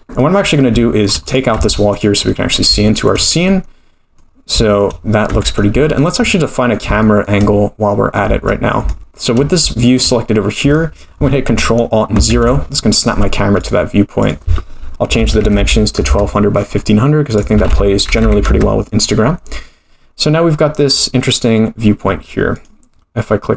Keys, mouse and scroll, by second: 0.2 middle click, 0.8 shift+middle click, 1.2 click, 1.6 x, 2.3 middle click, 2.9 shift+middle click, 3.5 middle click, 4.3-5.0 scroll down 3, 4.6 shift+middle click, 5.0-5.7 scroll up 2, 5.3 Tab, 5.8 shift+middle click, 6.3 middle click, 7.0 shift+middle click, 8.4-8.8 scroll down 1, 8.9 shift+middle click, 9.7 shift+middle click, 12.3 ctrl+alt+KP_0, 13.6 click, 14.2 click, 15.6 0, 18.2 click, 18.2 0, 19.6-20.1 scroll up 1, 20.8 scroll up 1, 22.5 click.